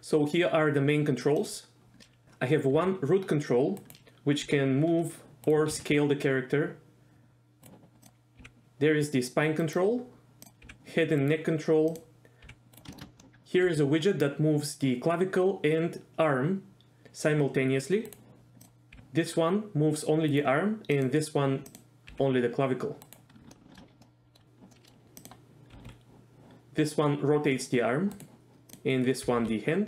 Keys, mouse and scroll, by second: 2.2 s, 2.8 s, 3.8 right click, 4.4 g, 5.4 right drag, 5.7 s, 7.6 right click, 8.0 click, 8.4 g, 9.6 right click, 10.4 click, 10.6 g, 11.2 right click, 11.9 click, 12.4 g, 12.7 right click, 12.9 shift+middle click, 13.2 middle click, 13.7 g, 18.1 right click, 18.9 g, 20.3 right click, 21.0 click, 21.7 click, 22.1 g, 23.0 right click, 23.5 shift+middle drag, 24.0 middle click, 24.7 middle click, 25.2 click, 25.8 r, 28.1 right click, 28.7 click, 29.3 r, 29.4 r.